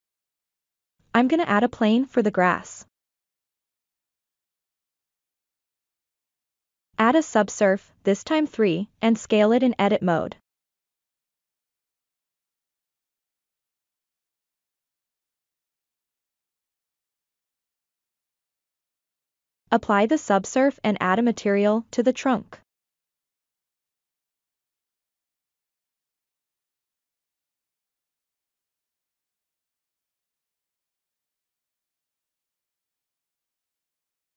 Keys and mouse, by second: 2.3-3.6 middle drag, 6.6 ctrl+3, 7.3 Tab, 8.6 s, 9.1-10.7 drag, 11.0-11.8 middle drag, 12.0 middle click, 12.8 click, 13.9 middle click, 15.2 KP_1, 16.6 click, 18.2-19.1 middle drag, 19.3 Tab, 20.4 ctrl+a, 23.0 click, 24.1 click, 26.3 click, 28.8 click.